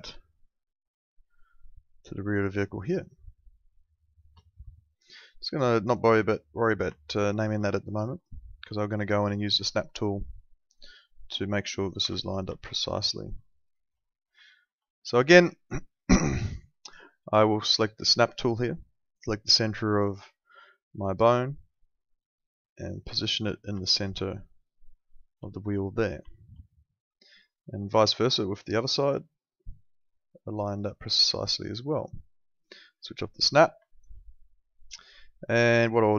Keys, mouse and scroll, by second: 0.4 shift+click, 5.8 click, 6.9 alt+middle click, 8.2 alt+middle click, 10.9 click, 12.0 z, 12.6 alt+middle click, 13.4 alt+middle click, 14.4 alt+middle click, 18.1 click, 23.8 alt+middle click, 26.3 alt+middle click, 28.7 click, 32.9 click, 33.8 alt+middle click.